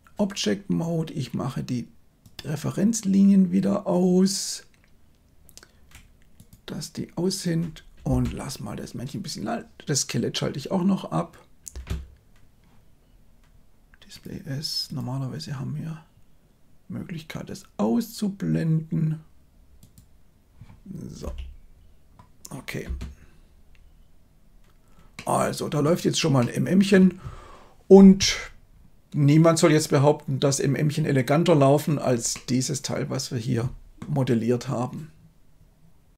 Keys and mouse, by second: 2.1-6.7 drag, 8.0 space, 11.6 space, 13.1 a, 14.1 click, 21.1 f, 22.7 space, 25.1-25.7 middle drag, 26.3-26.8 middle drag, 32.2-33.9 middle drag.